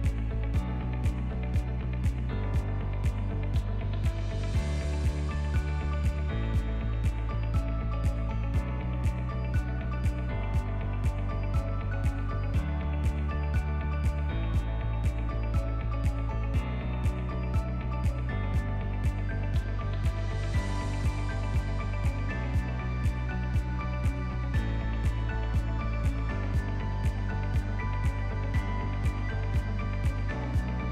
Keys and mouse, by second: 1.6 KP_1, 2.1 z, 3.0-3.4 shift+drag, 3.8 s, 4.8 g, 6.2 s, 7.4-7.9 middle drag, 8.2 ctrl+middle click, 8.5 alt+z, 9.7 z, 10.5 alt+z, 11.3-12.1 ctrl+middle drag, 12.3 alt+z, 12.5-13.3 shift+middle drag, 15.8 click, 18.6 click, 20.1 click, 21.1 drag, 22.6-25.4 drag, 27.2-28.2 drag, 30.8-30.9 drag.